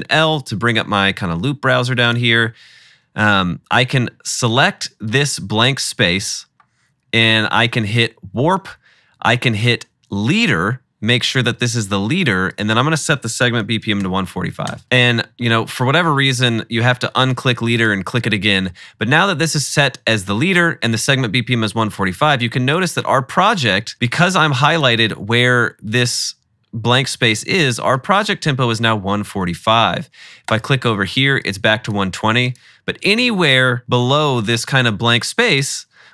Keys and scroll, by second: 13.4-14.5 typing, 33.8-34.4 typing.